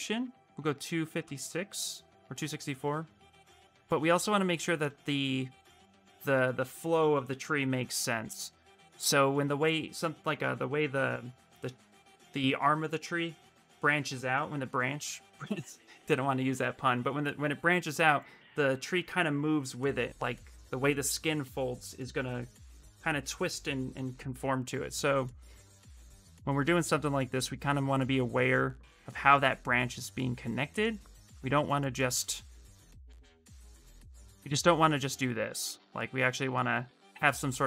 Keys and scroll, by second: 26.6 s, 35.4 ctrl+z.